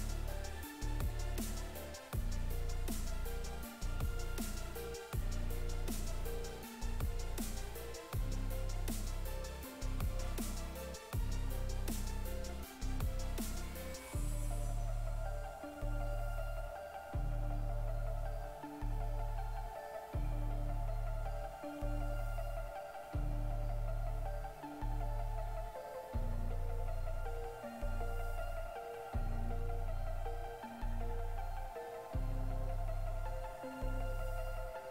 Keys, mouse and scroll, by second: 2.8 right click, 5.8 right click, 7.6 shift+right click, 9.1 shift+right click, 9.3 right click, 10.1 shift+right click, 10.6 ctrl+right click, 12.0 right click, 14.1 click, 14.4 right click, 15.3 click, 16.6 click, 16.9 right click, 22.0 click, 26.1 right click, 31.7 click, 32.1 right click, 33.6 right click, 34.5 shift+right click.